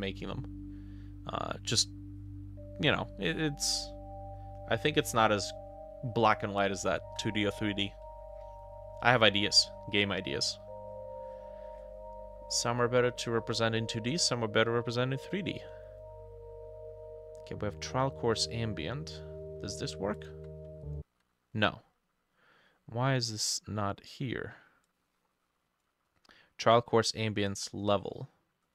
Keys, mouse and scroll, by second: 20.2-21.5 ctrl+drag.